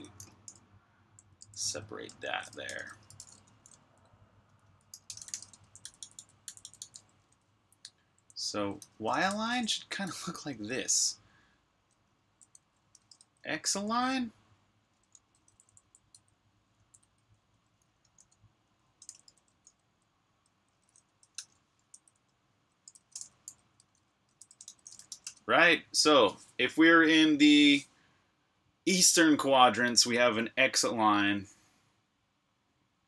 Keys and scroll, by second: 3.7 typing, 12.2-13.4 typing, 15.0 Escape, 15.1-19.3 typing, 20.3-25.6 typing.